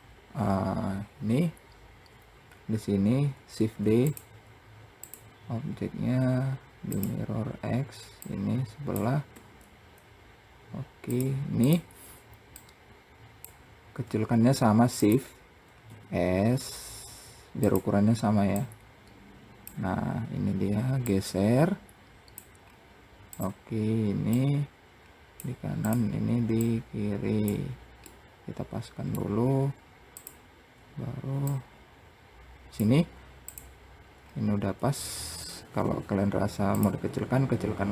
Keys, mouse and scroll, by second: 1.9-3.0 scroll up 1, 3.0 shift+d, 4.4-7.5 drag, 7.5 click, 8.8 r, 11.0 click, 12.0 click, 14.4 shift+click, 15.3 s, 18.0 click, 20.5-22.1 drag, 22.1 scroll up 3, 22.7 click, 23.8 click, 25.3 click, 26.0 click, 27.5-28.9 middle drag, 28.9-29.6 scroll down 2, 29.6 shift+click, 30.9 click, 32.3 `, 33.6-34.4 scroll up 2, 36.1 click, 37.4 click.